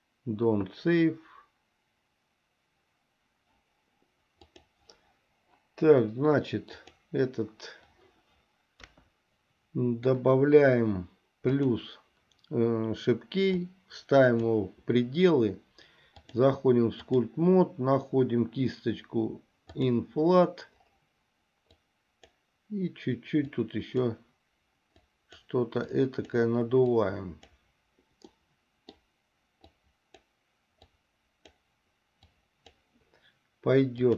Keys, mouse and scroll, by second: 4.7 click, 6.9 click, 8.9 KP_1, 11.7 click, 13.8 click, 16.5-17.6 drag, 19.9 click, 21.9 click, 23.7 click, 25.2 click, 26.2 click, 27.2 click, 28.6 middle click, 30.0 click, 31.1 click, 32.6 click.